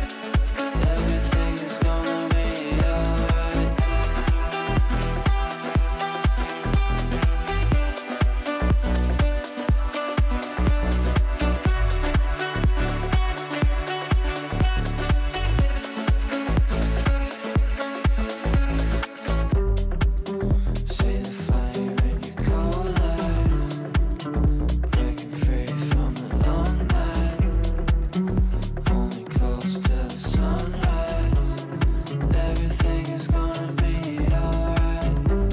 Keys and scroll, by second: 0.8 g, 13.1 ctrl+Page_Up, 15.7 g, 26.5 g.